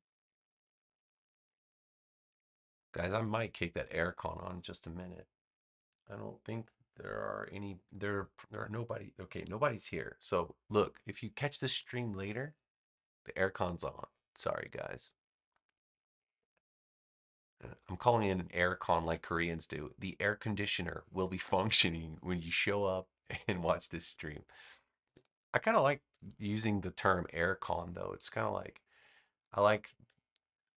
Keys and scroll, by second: 0.1 super+v, 2.2 space, 30.6 a.